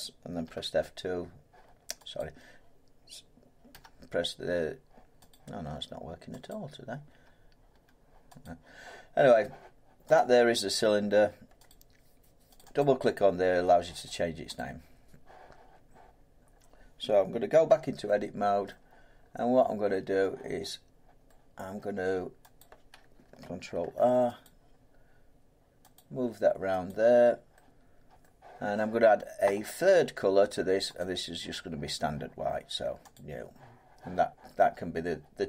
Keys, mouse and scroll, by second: 0.4 F2, 2.1 click, 3.7 F2, 5.3 click, 6.5 click, 7.1 F2, 7.7 F2, 8.4 click, 10.1 click, 11.7 click, 12.5 click, 12.8 click, 14.5 click, 16.4 middle click, 16.5 middle click, 17.7 Tab, 18.0 scroll down 3, 18.7 middle click, 19.1 scroll down 3, 19.4-19.9 scroll, 20.2 scroll, 21.9-22.6 scroll, 22.6 click, 23.8 ctrl+r, 24.4 click, 25.9 click, 27.5 click, 28.2 middle click, 29.4 middle click, 31.0 click, 33.1 click.